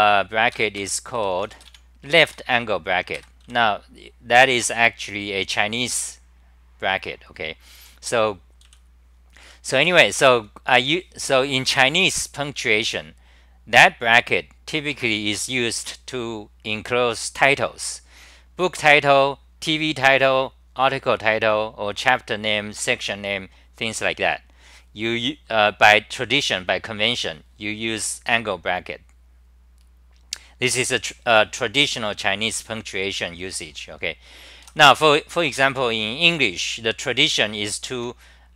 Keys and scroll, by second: 0.5 ctrl+g, 0.7 ctrl+g, 1.1 b, 1.4 n, 2.3 2, 3.1 ctrl+g, 3.4 w, 8.6 w, 9.8 3, 37.5 r, 38.0 9.